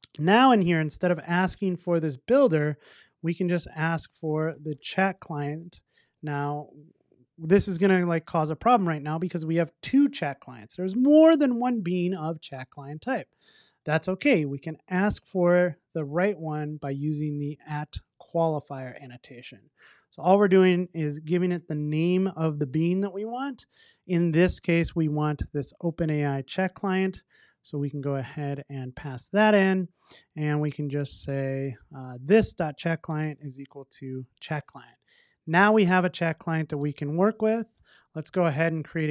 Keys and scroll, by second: 5.6 Return, 18.9 Return, 26.6 super+c, 32.8 super+v, 33.8 Return, 34.5 super+s.